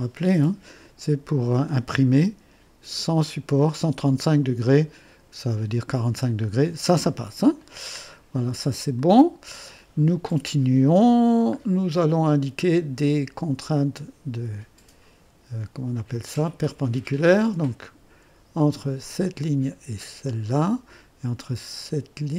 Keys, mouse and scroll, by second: 0.9 click, 1.3-2.9 typing, 1.7-3.8 drag, 4.0 click, 4.0 typing, 7.7 click, 9.0 click, 9.0 typing, 11.6-11.9 scroll up 1, 11.6 typing, 16.6 click, 19.1 click, 20.3 click.